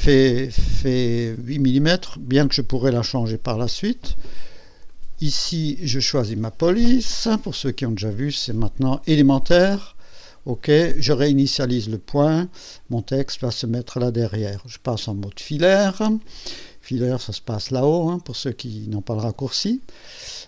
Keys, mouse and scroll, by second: 1.2 click, 2.8 KP_8, 4.9 click, 7.3 click, 10.0 click, 11.5 click, 12.7 click.